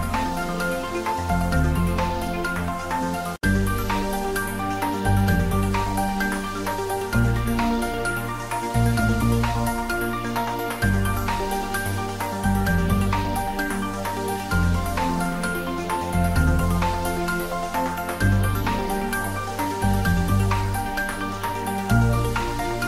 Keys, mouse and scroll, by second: 0.7 3, 1.0 Return, 1.7 scroll down 1, 2.2 click, 3.1 click, 4.2 3, 4.4 Return, 5.1 scroll up 1, 6.1 click, 6.7-8.2 middle drag, 8.3 scroll down 1, 9.1 scroll up 1, 9.8-11.3 middle drag, 11.4 click, 11.9-12.4 scroll down 1, 12.4 click, 13.0 r, 14.2 click, 14.5 g, 15.8 click, 16.3 r, 17.2 click, 17.5 scroll down 1, 17.7 middle click, 18.3 scroll up 1, 21.5 scroll down 1, 22.3 click.